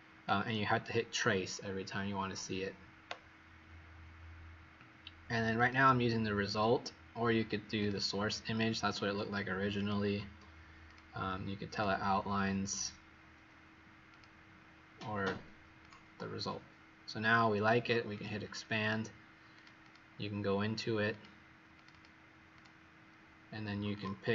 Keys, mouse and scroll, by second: 19.8 click, 21.7 click, 21.9 click, 22.5 click, 23.9 click.